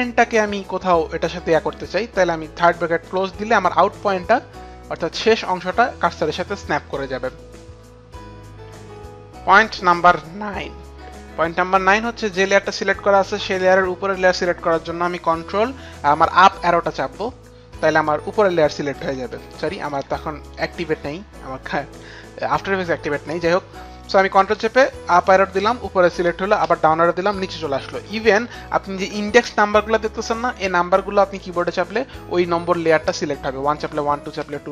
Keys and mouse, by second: 16.2 ctrl+Up, 19.7 ctrl+Up, 19.7 click, 20.4 ctrl+Up, 20.4 click, 23.9 click, 24.6 ctrl+Up, 26.4 ctrl+Up, 26.5 ctrl+Down, 26.5 ctrl+Up, 28.8 ctrl+Down, 28.8 ctrl+Up, 31.5 KP_1, 33.7-34.3 typing.